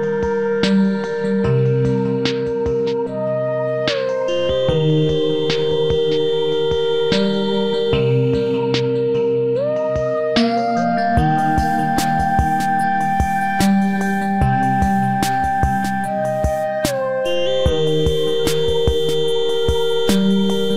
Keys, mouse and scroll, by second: 6.4 shift+Escape, 13.4 shift+click, 14.6 shift+middle click, 16.0-17.1 typing, 17.1 Return, 19.6 space, 19.7 Escape.